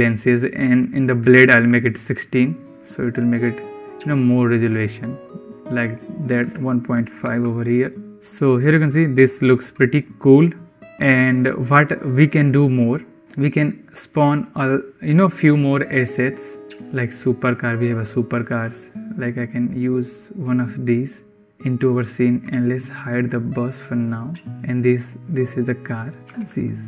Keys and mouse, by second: 0.6-1.8 drag, 6.3-7.5 drag, 8.1 ctrl+s, 13.9-20.9 drag, 22.9 click, 26.2 g.